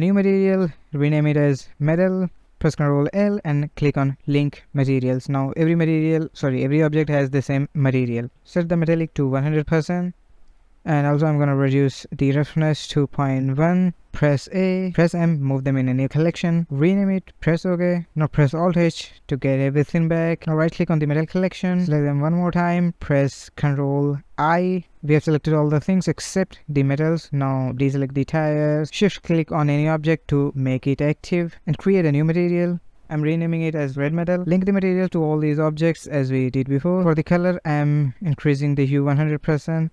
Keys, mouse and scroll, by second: 2.5 ctrl+l, 4.6 click, 5.0 click, 5.5 click, 5.8 click, 6.2 click, 6.8 click, 7.3 click, 7.7 click, 8.1-9.6 scroll down 1, 9.6-10.3 drag, 10.3-11.5 scroll down 1, 11.5-13.7 drag, 14.1 a, 14.8 m, 18.4 alt+h, 19.6-22.8 right drag, 24.5 ctrl+i, 25.3 shift+middle click, 26.0 shift+click, 26.2 shift+click, 26.8-28.2 middle drag, 28.2-28.6 scroll down 1, 28.6-29.0 shift+middle drag, 29.0 ctrl+z, 29.4 shift+click, 29.8 middle click, 30.8-33.0 drag, 33.8 ctrl+l, 36.1 click.